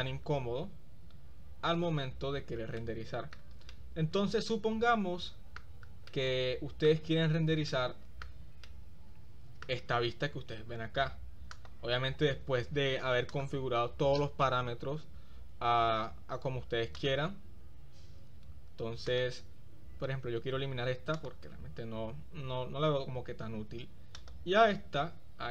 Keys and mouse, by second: 3.0 shift+middle click, 3.9-5.9 middle drag, 4.5-5.9 drag, 6.3 middle click, 7.8-8.5 shift+middle drag, 8.9-9.8 middle drag, 11.6 click, 13.4-14.6 drag, 19.1 click, 20.8 x, 24.2 click.